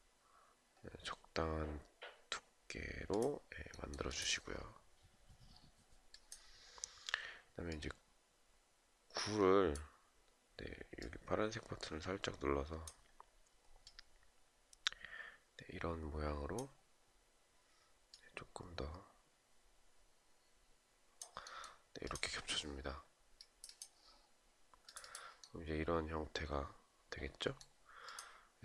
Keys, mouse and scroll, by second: 28.4 shift+click.